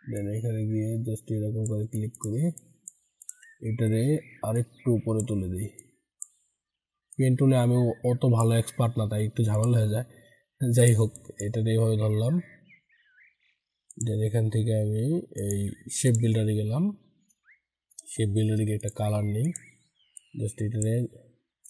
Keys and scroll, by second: 21.4 ctrl+z.